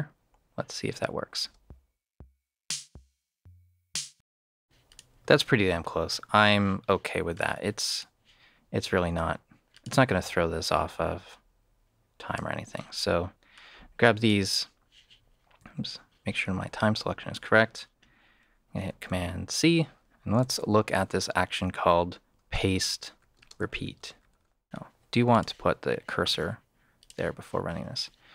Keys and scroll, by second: 1.4 space, 4.4 space, 19.1 super+c, 20.5 shift+/, 22.3-24.5 typing.